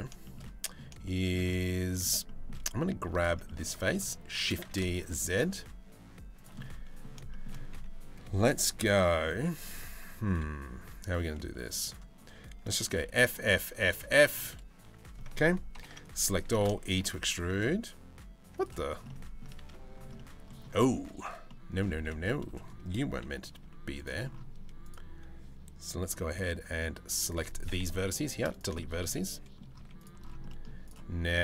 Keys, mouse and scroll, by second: 0.1 middle click, 0.7 shift+middle click, 1.3 middle click, 1.9 middle click, 2.8 alt+click, 3.1 middle click, 4.0 shift+d, 6.2 middle click, 6.9 shift+middle click, 11.5 click, 12.7 f, 13.0 f, 13.6 f, 15.4 ctrl+l, 16.1 e, 18.7 middle click, 19.2 ctrl+z, 19.8 middle click, 20.7 ctrl+z, 21.1 middle click, 21.6 1, 21.9 middle click, 22.9 KP_3, 23.3 z, 25.9 b, 27.5 Delete, 28.4 shift+middle click, 28.8 middle click, 29.4 z, 30.1 middle click, 31.0 middle click.